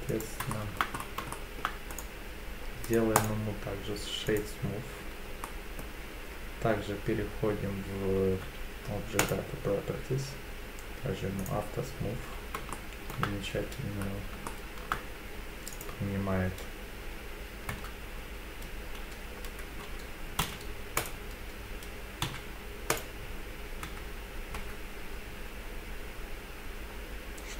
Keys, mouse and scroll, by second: 0.1 click, 0.5 shift+middle drag, 1.0 scroll up 2, 1.3 shift+middle drag, 1.9-2.9 right drag, 3.2 right click, 5.4-5.8 middle drag, 9.2 click, 11.4 click, 12.7-13.1 shift+middle drag, 14.0-14.3 scroll up 2, 14.5-14.9 shift+middle drag, 15.7 click, 17.7 Tab, 20.4 3, 21.0-22.2 drag, 22.2 x, 23.8 Tab, 24.6 Tab.